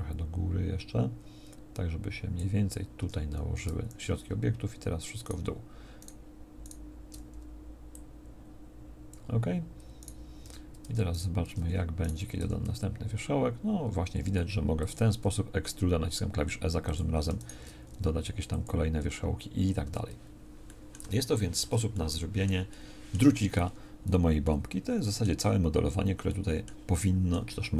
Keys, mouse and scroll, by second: 3.0 Tab, 10.4 Tab, 10.9 Tab, 11.5 Tab, 12.4 e.